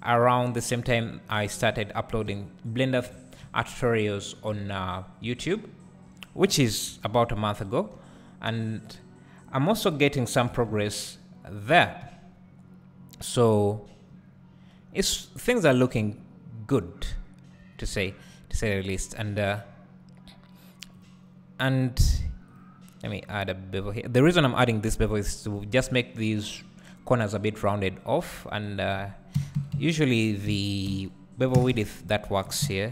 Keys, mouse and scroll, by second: 0.6-2.3 drag, 2.3 j, 3.1 Tab, 3.4 `, 4.5 Tab, 4.9-5.2 scroll up 1, 5.2 `, 6.9 3, 7.0 click, 7.9 e, 9.8 click, 10.5 s, 11.6 click, 11.7 Tab, 12.0 `, 20.9-32.9 drag, 29.7 KP_Decimal, 31.7 KP_0.